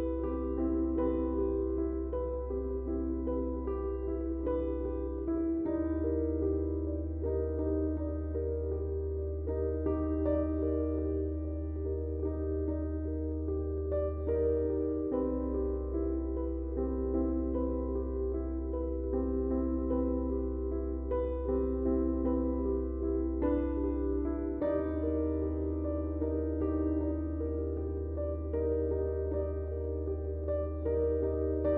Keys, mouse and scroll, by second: 0.3 ctrl+space, 0.5 ctrl+click, 0.7 ctrl+space, 1.4 click, 4.0 shift+click, 8.0 click, 17.3 space, 17.7 space, 18.3 space, 18.4-21.7 drag, 21.7 right click, 23.7 click, 25.8 click, 26.2 space, 26.4 click, 27.9-31.2 drag.